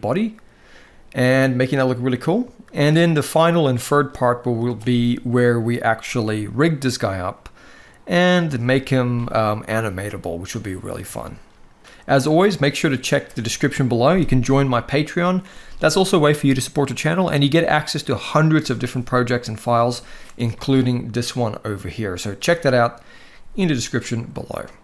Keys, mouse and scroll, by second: 0.5-1.7 middle drag, 2.3 shift+middle drag, 3.7 middle click, 9.6-10.6 middle drag, 10.9 shift+middle drag, 11.8 middle click, 20.5-22.0 middle drag, 23.5 middle click.